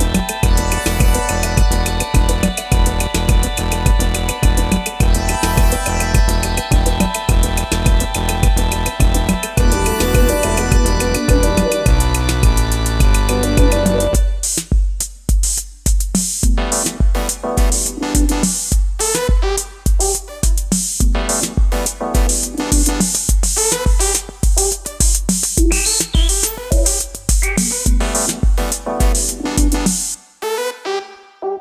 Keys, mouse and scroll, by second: 29.2-30.0 typing, 31.3-31.6 typing.